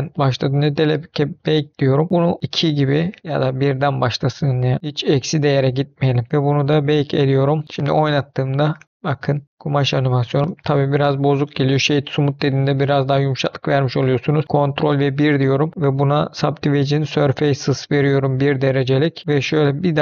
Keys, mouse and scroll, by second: 0.6 click, 1.3-4.7 drag, 6.7-9.5 drag, 7.7 space, 9.5 middle click, 10.4 space, 10.9-11.9 right drag, 14.9 ctrl+1, 15.7 middle click, 16.1 scroll up 2, 16.7 middle click, 17.8 middle click, 17.9-18.6 scroll down 3, 18.9-19.2 scroll down 2, 19.2 middle click, 19.6 click.